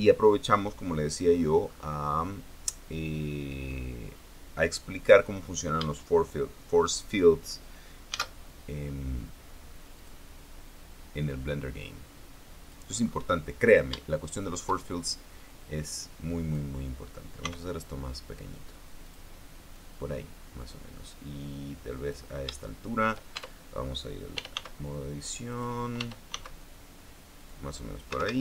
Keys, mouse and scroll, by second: 0.0-0.7 scroll down 2, 2.4-3.0 scroll up 1, 3.0-3.4 scroll down 2, 4.4-4.7 scroll up 2, 4.8-5.1 scroll down 2, 8.8 shift+a, 10.7 click, 12.0-13.6 drag, 13.6 scroll down 1, 13.7-14.2 scroll up 1, 14.2-14.6 scroll down 1, 14.7 shift+middle click, 16.2-17.5 drag, 18.2 s, 19.8 click, 20.5-23.0 drag, 23.3 shift+middle click, 24.1 shift+Tab, 24.8-27.0 typing, 26.2 click, 28.1 click.